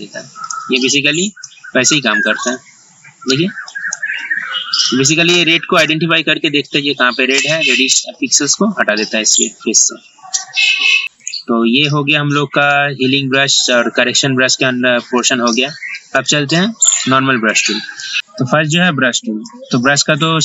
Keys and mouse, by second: 11.0 right click, 11.3 click, 12.7 right click, 17.6 click.